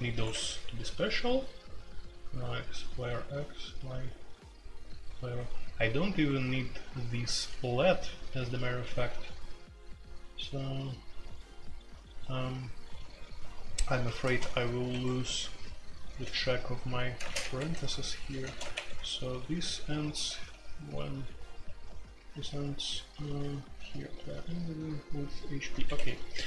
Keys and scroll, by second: 0.0-26.4 typing, 14.9 Escape, 17.5 Escape, 18.7 Escape, 25.8 Escape.